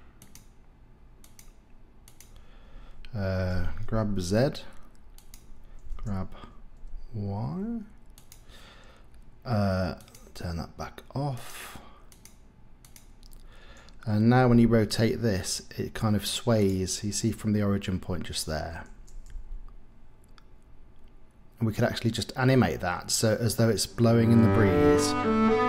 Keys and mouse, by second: 1.3-2.4 drag, 3.5 g, 4.1 z, 5.2 click, 5.9 g, 6.7 y, 10.0-11.4 drag, 12.2-13.2 drag, 14.5 r, 19.3 r.